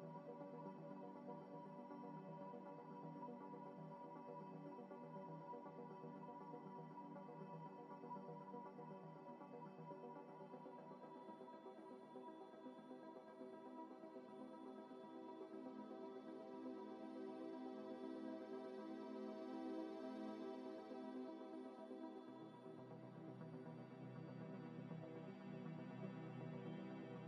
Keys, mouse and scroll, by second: 0.7 z, 1.5 double click, 2.8 scroll down 1, 4.4 x, 5.8 Delete, 7.4 Delete, 7.5 End, 9.9 z, 10.3 z, 10.4 scroll up 1, 10.6 middle click, 14.4 middle click, 15.1 scroll up 1, 15.4 scroll down 1, 15.6 middle click, 16.8 z, 17.1 z, 17.4 z, 17.8 middle click, 18.0 z, 18.5 middle click, 19.8 z, 20.3 z, 20.3 scroll down 1, 20.6 middle click, 21.7 z, 24.3 scroll up 1, 24.9 scroll up 1, 25.8 scroll up 1.